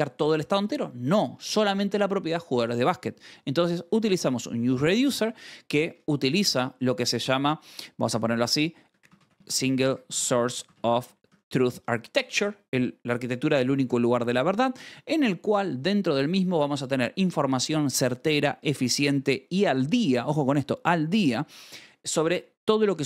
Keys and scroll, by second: 3.5 j, 3.9 v, 6.0 Escape, 6.7 o, 8.2-11.3 typing, 11.4 Escape, 12.2 ctrl+s.